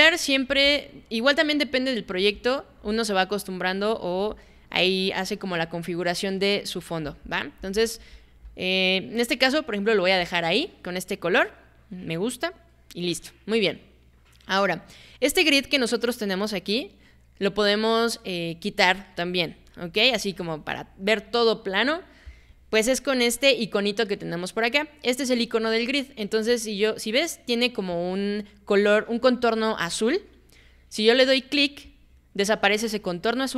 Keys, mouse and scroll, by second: 0.5 alt+b, 2.2 alt+b, 2.7 alt+b, 4.2 alt+b, 7.0 alt+b, 7.6 alt+b, 8.0 alt+b, 8.3 alt+b, 31.9 click.